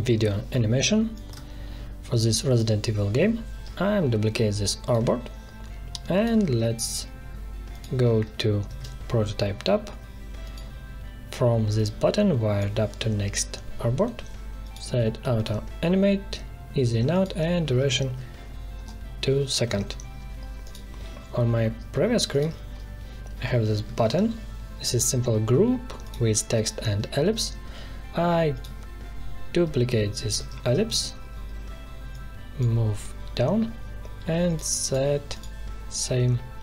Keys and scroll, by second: 8.6 alt+2, 18.0 2, 18.7 Return, 23.8 alt+1, 30.2 ctrl+c, 30.6 ctrl+v.